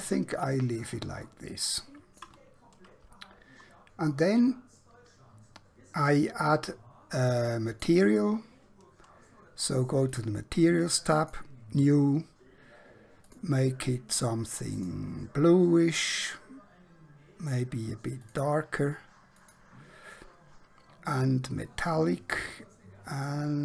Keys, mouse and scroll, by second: 1.3 shift+middle click, 6.4 middle click, 10.2 click, 18.2 click.